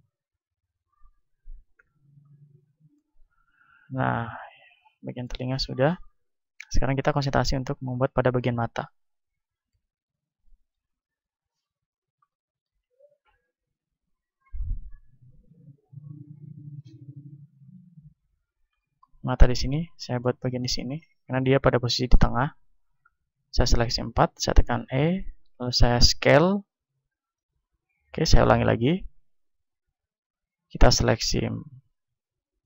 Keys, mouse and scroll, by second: 0.2-2.6 drag, 1.7 t, 2.6-4.8 middle drag, 2.6 a, 6.6-8.2 right drag, 7.2 Tab, 8.2-11.2 middle drag, 8.5 KP_1, 9.8 z, 11.5 z, 14.1-16.3 middle drag, 15.4 ctrl+Tab, 16.3-18.2 right drag, 18.9-20.2 drag, 18.9-20.2 right drag, 20.2 z, 21.0-25.0 middle drag, 24.5 e, 25.0-26.8 drag, 25.4 s, 27.4-29.8 drag, 28.4 ctrl+z, 29.1 ctrl+z, 29.8 a, 30.4-32.6 right drag.